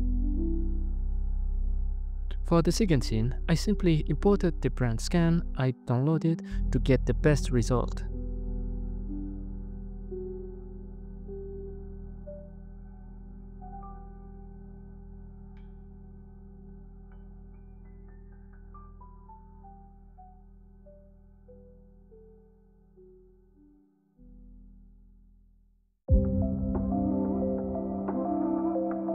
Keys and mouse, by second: 1.9 F4, 7.5 KP_Decimal, 8.8 KP_Divide, 10.4 alt+shift+z, 12.9 ctrl+j, 13.5 shift+middle click, 14.2 Tab, 15.5 a, 16.3 b, 16.4 click, 19.8 x, 22.5 c, 26.7 right click, 26.9 c.